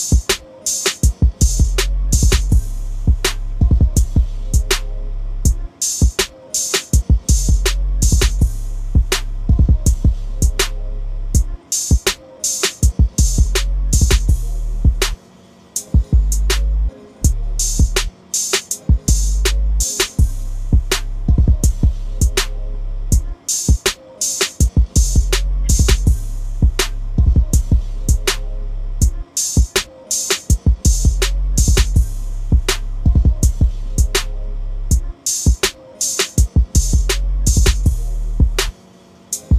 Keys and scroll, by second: 5.7-7.1 typing, 11.7-12.5 typing, 18.7 BackSpace, 19.4 BackSpace, 31.3 typing.